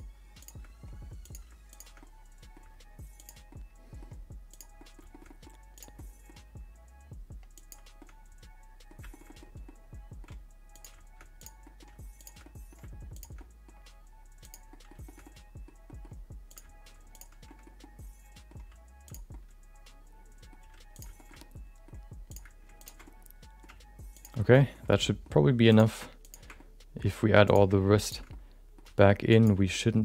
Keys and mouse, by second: 0.4 shift+click, 1.2 click, 1.7 shift+click, 2.0 middle click, 2.6 g, 3.6 middle click, 4.1 g, 4.7 middle click, 5.3 middle click, 5.7 click, 5.9 middle click, 6.4 g, 8.1 middle click, 9.1 shift+middle click, 9.3 middle click, 9.7 middle click, 10.7 click, 11.4 click, 11.6 middle click, 12.2 shift+click, 12.4 middle click, 13.1 shift+click, 13.3 middle click, 13.9 g, 14.8 middle click, 15.1 middle click, 15.9 middle click, 16.5 click, 17.1 click, 17.6 middle click, 17.9 middle click, 18.5 g, 19.4-20.5 middle drag, 20.6 r, 21.2 shift+middle click, 21.5 middle click, 22.3 click, 23.1 middle click, 23.6 g, 24.5 middle click, 25.1 middle click, 25.7 click, 26.7 middle click, 27.4 click, 28.4 middle click, 28.8 g, 29.8 middle click.